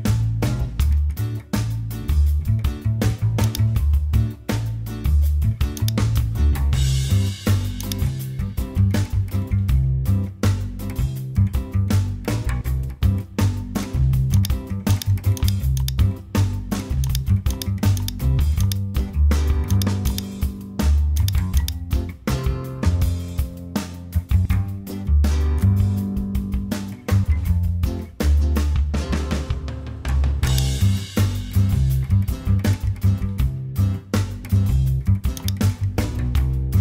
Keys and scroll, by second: 0.0-1.9 typing, 5.3 super+t, 11.0 Return, 23.9 super+g, 25.4 super+j, 26.6 super+e, 28.0 super+a, 29.2 super+j, 32.6 BackSpace.